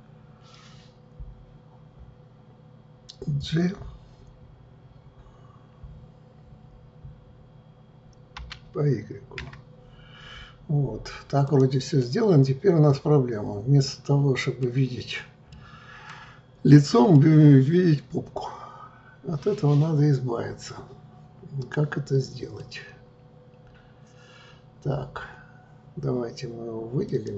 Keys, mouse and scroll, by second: 8.3 g, 12.0-15.0 middle drag, 15.5-21.6 middle drag, 27.0 click.